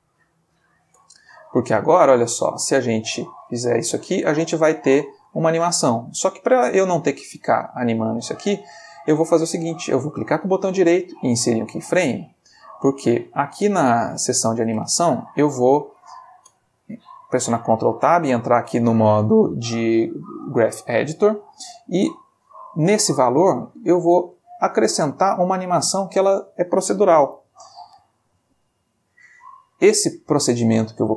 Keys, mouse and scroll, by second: 0.5 click, 1.0 Tab, 1.3-1.9 middle drag, 2.8-8.7 drag, 8.1 i, 10.2 right click, 11.2 click, 14.2 click, 16.5 ctrl+Tab, 18.2 click, 19.7 click, 20.5 Escape, 22.1 click, 22.7 click, 23.5 middle click, 24.3-25.4 ctrl+middle drag, 27.3 n, 28.2 middle click, 29.5 click, 30.5 middle click.